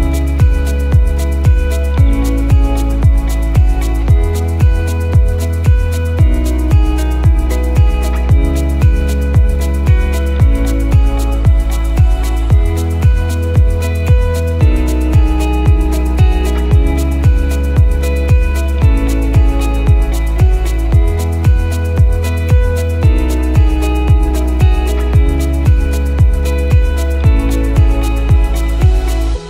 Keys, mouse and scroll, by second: 2.6 click, 6.3 click, 21.5 click, 22.0 scroll down 1, 23.4 click, 23.7-24.4 scroll down 1, 24.9 click.